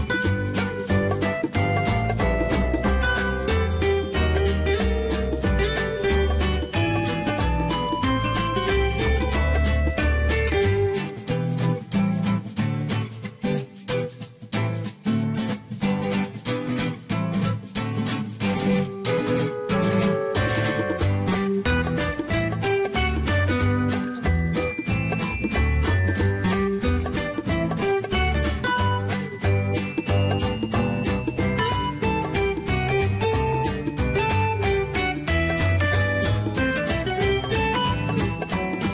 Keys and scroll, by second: 21.7-22.7 typing.